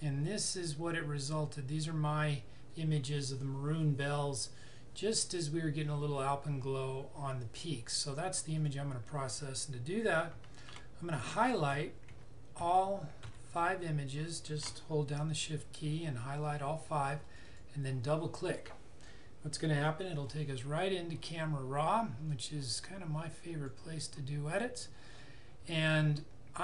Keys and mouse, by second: 8.6 click, 17.2 click, 22.3 click.